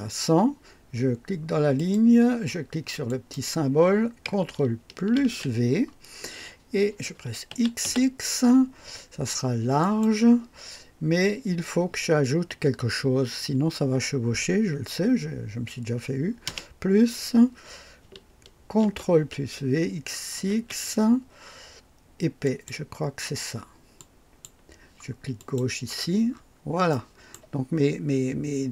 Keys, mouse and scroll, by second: 1.7 click, 3.1 click, 5.2 ctrl+v, 5.2 ctrl+v, 7.5 x, 9.8 click, 10.2 typing, 16.4 +, 18.8 ctrl+v, 18.8 ctrl+v, 20.4 x, 20.6 x, 22.4 click, 24.0 click, 25.4 click, 26.3 scroll up 1, 26.9 right click.